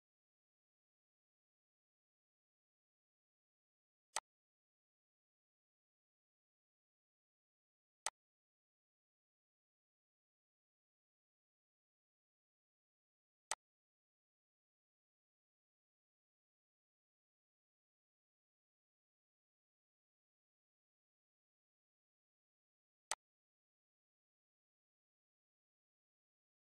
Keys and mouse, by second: 4.0 click, 5.4 click, 6.6 click, 11.3 click, 16.6 click, 23.8 click.